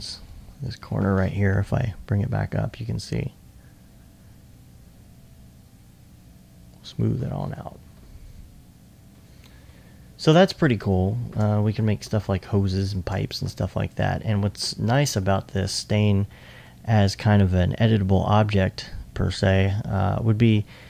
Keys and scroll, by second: 0.2 2, 2.2 2, 7.9 2, 8.1 2, 11.9 alt+1.